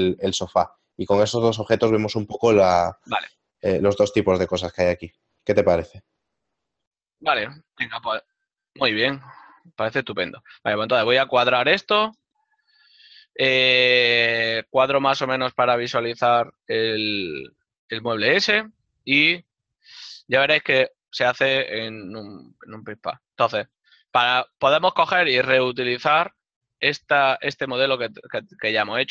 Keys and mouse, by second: 7.6 click, 18.3 click, 22.8 click.